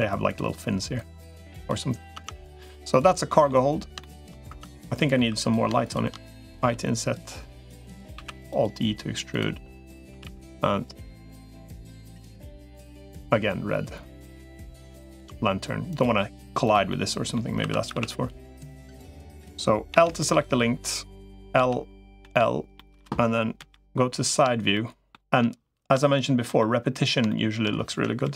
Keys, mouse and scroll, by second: 0.8 click, 2.0 Tab, 2.6 middle click, 3.8 shift+middle click, 4.4 Tab, 4.4 click, 5.0 3, 5.2 click, 5.6 shift+click, 6.4 i, 8.0 alt+e, 9.8 a, 10.0 g, 12.0 g, 14.8 g, 16.4 click, 16.7 middle click, 17.6 2, 17.8 a, 19.8 l, 20.0 middle click, 21.4 l, 22.0 l, 22.6 middle click, 23.4 KP_3, 24.5 shift+middle click, 25.8 shift+middle click, 26.4 middle click, 27.1 shift+middle click, 28.0 KP_Decimal.